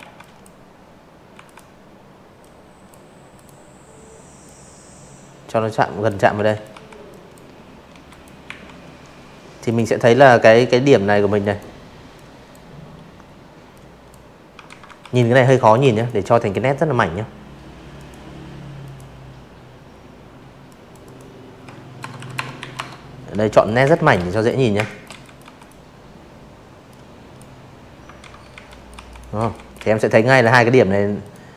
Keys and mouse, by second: 0.3 click, 1.4-3.0 drag, 3.3 z, 3.4 click, 3.7 v, 4.0 click, 4.8 z, 5.0 click, 5.4 a, 6.6 click, 7.4 click, 8.4 click, 9.1 click, 10.7 click, 11.6 ctrl+z, 11.7-13.3 typing, 12.1 click, 12.5 click, 12.9 click, 13.2 click, 14.9 click, 15.8 click, 17.6 click, 18.0 click, 20.3-22.4 typing, 20.6 click, 20.9 click, 21.2 click, 21.8 click, 22.2 click, 22.6 click, 23.9-24.3 drag, 25.2 ctrl+z, 25.6 click, 25.6-27.2 typing, 26.0 click, 26.4 click, 27.1 click, 28.2 click, 28.6 a, 28.8 click, 29.6 click, 30.8 click.